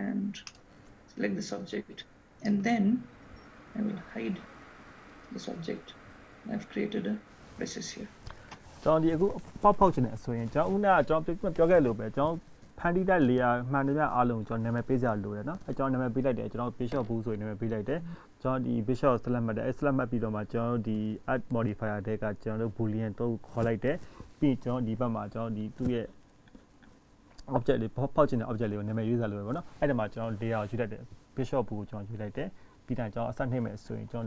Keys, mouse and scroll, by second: 2.7 click, 3.3-4.2 scroll down 5, 4.2-5.4 scroll up 3, 5.4 click, 6.6 scroll up 1, 7.7-8.5 scroll down 1, 10.2-10.8 scroll down 1, 10.8 middle click, 12.3-13.2 scroll up 1, 15.0 middle click, 15.5 click, 16.5 click, 19.5 middle click, 21.3-22.3 scroll down 3, 23.0-24.5 scroll up 2, 33.1 click.